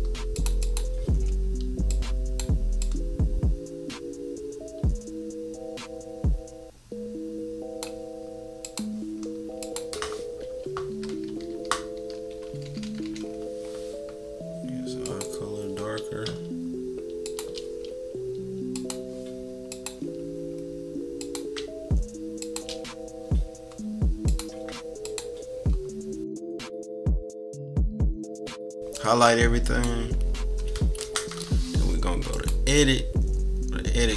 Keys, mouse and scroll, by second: 0.3 click, 0.6 click, 1.8 click, 2.8-7.8 drag, 8.6 click, 9.6-11.2 drag, 11.2-12.6 typing, 13.2-13.7 scroll up 3, 15.0 click, 17.2 shift+click, 18.7 click, 19.7 click, 21.2 click, 22.4 shift+click, 22.7 scroll down 2, 24.2 click, 25.0 click, 26.4 -, 26.4 =, 26.6 =, 26.7 click, 26.7 scroll down 1, 26.9 shift+click, 27.1 click, 27.2 click, 27.6 -, 27.6 scroll up 1, 27.8 click, 28.4 scroll up 1, 28.6 click, 28.9-29.9 drag, 30.1 =, 32.3 click.